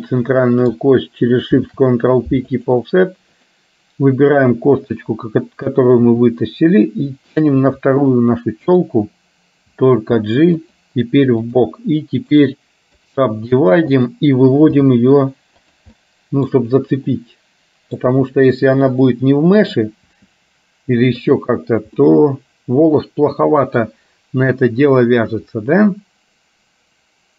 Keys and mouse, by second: 1.6 ctrl+p, 3.4 click, 7.8-8.8 middle drag, 11.5 click, 11.5 g, 12.4 right click, 14.1 click, 14.9 g, 16.0 middle click, 17.1-18.1 middle drag, 18.3 g, 20.4 g, 22.1-23.9 middle drag.